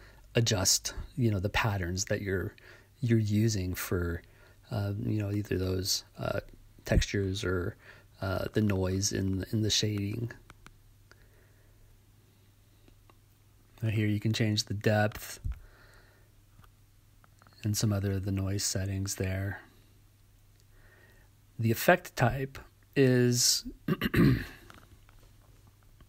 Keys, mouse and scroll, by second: 2.0-3.3 right drag, 3.9-5.2 right drag, 6.9-11.6 drag, 11.8-13.3 right drag, 15.9-23.1 drag, 23.6-25.0 right drag.